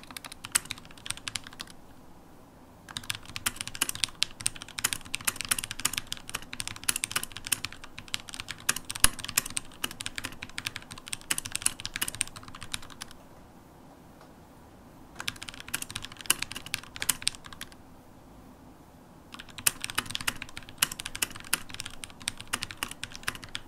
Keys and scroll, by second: 0.7 super+h, 7.6-17.1 typing, 19.6 super+h, 20.4 super+`, 21.8 shift+super+p, 22.5 shift+super+p.